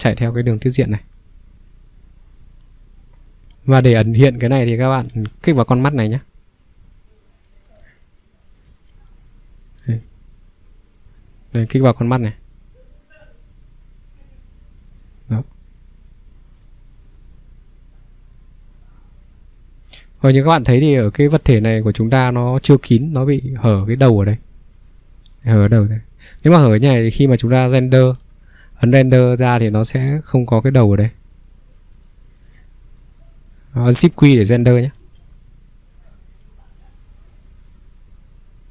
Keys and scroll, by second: 5.2 ctrl+3, 7.7 ctrl+3, 8.6 ctrl+2, 8.9 ctrl+1, 10.0 ctrl+1, 13.3 Escape, 27.8 q, 35.0 q, 36.4 Escape.